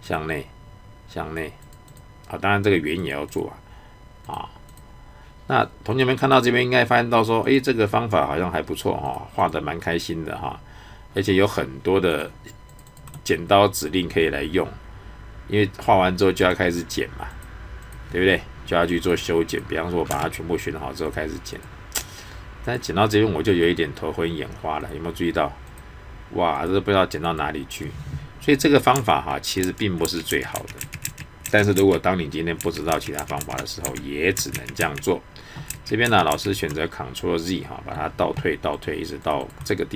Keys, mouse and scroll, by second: 8.2-9.0 scroll up 1, 9.0 click, 9.6-10.3 scroll down 1, 10.3 scroll up 1, 10.8 scroll down 1, 12.1 click, 13.1 right click, 13.4-13.7 scroll up 1, 14.0 middle click, 16.4 click, 20.1 space, 20.3-21.0 scroll up 1, 21.0 click, 27.8-28.9 scroll down 1, 29.6 ctrl+z, 34.5 ctrl+z, 37.2-37.6 scroll up 1, 37.6 middle click, 38.7 click, 39.6 right click.